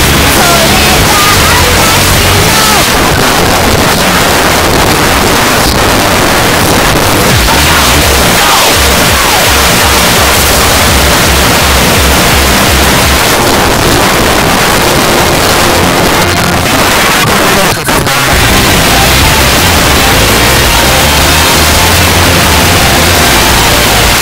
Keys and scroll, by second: 2.8 Page_Down, 13.2 Page_Down, 24.1 space.